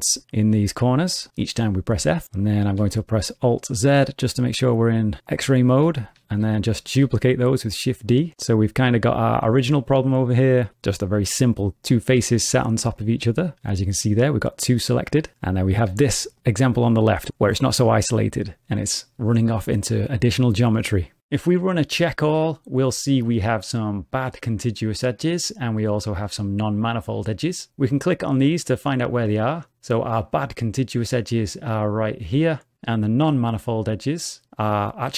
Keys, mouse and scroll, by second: 0.3 click, 0.5 f, 3.1 alt+z, 4.5 click, 5.6-5.9 scroll down 2, 5.9 shift+middle click, 6.9 shift+d, 8.4 middle click, 12.5 3, 12.9 click, 16.1 shift+middle click, 22.0 click, 29.2 click, 33.4 click.